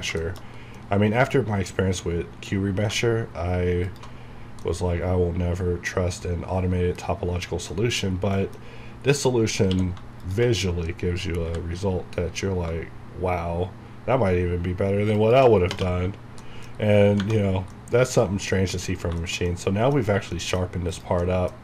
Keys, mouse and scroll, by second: 0.2 shift+middle click, 0.8-2.7 middle drag, 2.7 scroll up 1, 3.9 alt+shift+click, 4.2 shift+scroll down 1, 8.1 scroll down 1, 8.4 middle click, 8.7 scroll up 1, 9.7 q, 15.5 shift+click, 16.2 scroll down 1, 16.4 middle click, 16.7 scroll down 1, 17.5 scroll down 1, 17.7 middle click, 19.0 scroll down 1, 19.2 shift+middle click, 20.0 scroll up 1, 20.3 middle click, 21.2 middle click.